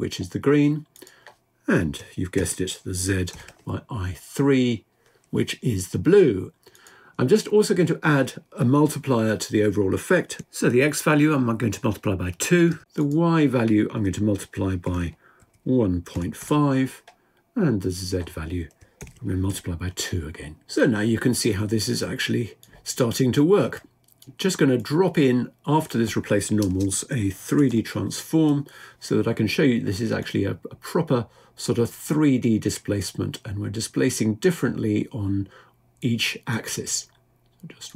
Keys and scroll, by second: 2.2 typing.